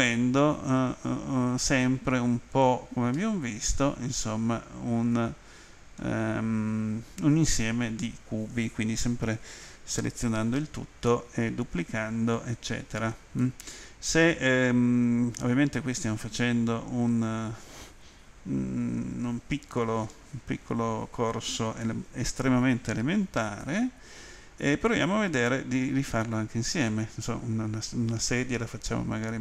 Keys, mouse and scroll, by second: 3.1 middle click, 13.4 middle click.